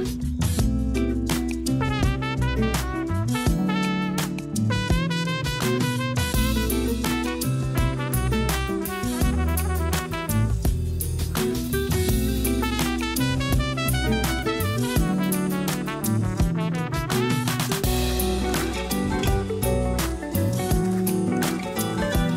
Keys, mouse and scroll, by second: 1.1 s, 2.6 click, 3.2 click, 3.5 scroll up 3, 4.2 click, 4.7 a, 6.5 click, 7.2-7.7 scroll up 1, 7.7 click, 8.4 click, 8.9 Tab, 9.9 r, 11.1 g, 12.7 a, 13.0 a, 13.2 shift+middle click, 13.5 click, 13.7 scroll up 1, 16.7 KP_Divide, 18.0 click, 18.6 scroll up 3, 19.0-19.4 shift+middle drag, 19.5 scroll up 2, 19.7 Tab, 20.2 click, 22.0 KP_Divide.